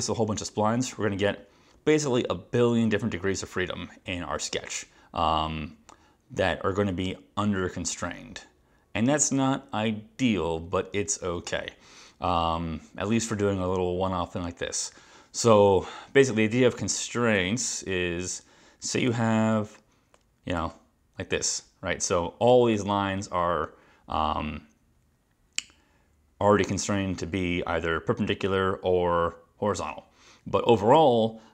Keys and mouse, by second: 19.2 click, 20.7 click.